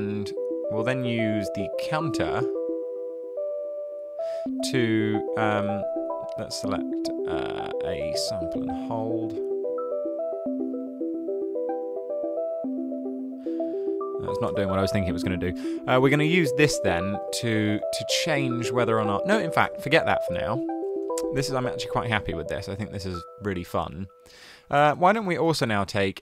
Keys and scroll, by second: 6.2 super+a, 7.7-8.5 typing, 14.5 BackSpace, 16.6 super+a, 16.7-17.5 typing, 19.7 BackSpace, 20.4 BackSpace, 24.5 super+a, 24.8-26.1 typing.